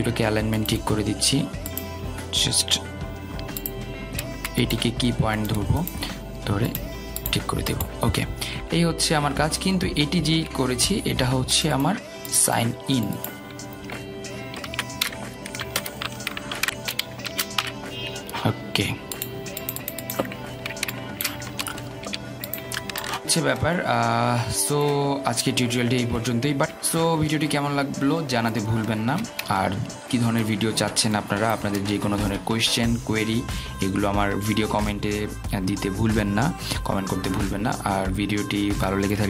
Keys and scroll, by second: 17.3 ctrl+a.